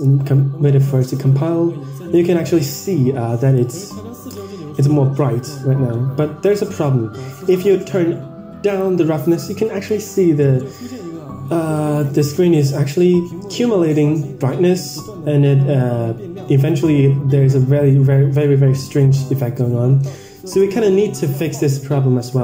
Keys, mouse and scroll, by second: 3.5 middle drag, 4.1 middle click, 7.8-8.9 drag, 9.9-10.4 scroll down 4, 10.4 scroll up 5, 11.9 click, 12.6 scroll down 3, 13.1 scroll up 3, 13.5-13.9 scroll down 2, 14.5-14.8 scroll up 3, 14.8-15.7 scroll down 10, 15.7-16.2 scroll up 2, 16.2 scroll down 2, 16.5-16.8 scroll up 2, 16.8 scroll down 1, 16.9 scroll up 2, 17.2 scroll down 2, 17.3 scroll up 2, 18.4-18.9 scroll down 2, 18.9-19.3 scroll up 1, 19.8-20.2 scroll down 2, 20.1-20.8 scroll up 3, 21.4-22.0 scroll down 2, 22.0-22.3 scroll up 1.